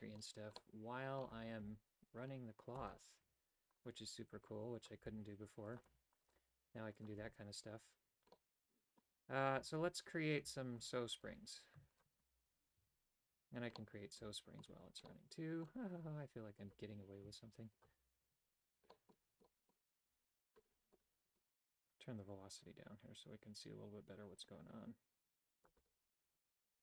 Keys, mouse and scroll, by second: 0.0 shift+middle click, 0.6 middle click, 1.6 ctrl+r, 4.8 right click, 5.0 g, 5.9 a, 6.4 g, 7.2 a, 8.4 middle click, 11.2 right click, 12.0 shift+right click, 12.4 f, 12.8 a, 13.8 middle click, 15.0 middle click, 18.0 f, 18.3 a, 18.9 middle click, 19.5 middle click, 22.3-25.7 drag.